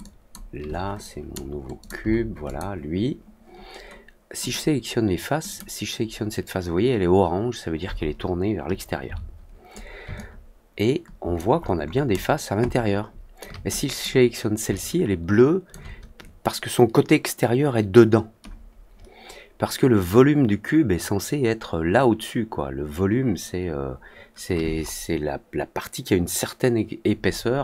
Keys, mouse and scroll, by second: 0.9 drag, 1.7 click, 2.4 click, 4.3 click, 5.4 click, 10.1-11.3 alt+drag, 11.5 alt+middle click, 11.8 alt+middle click, 12.0-13.3 alt+drag, 13.8 click, 14.7 alt+click.